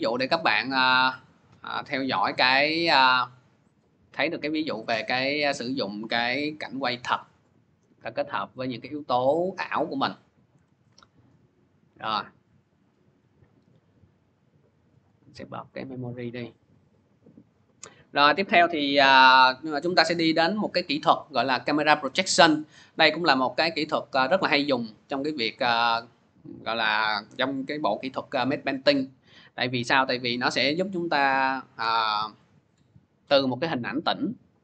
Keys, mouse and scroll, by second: 2.9 click, 8.4 click, 10.4 Delete, 12.0 click, 13.3 click, 14.9 click, 15.7 click.